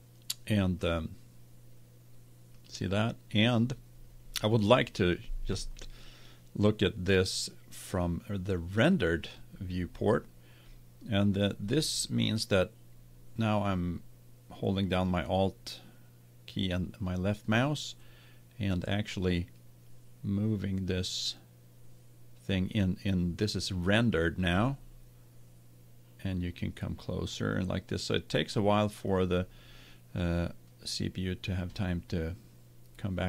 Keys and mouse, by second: 0.8-4.5 drag, 7.1 click, 12.0-13.9 middle drag, 19.7-21.7 middle drag, 25.4-28.4 middle drag, 32.9-33.2 middle drag.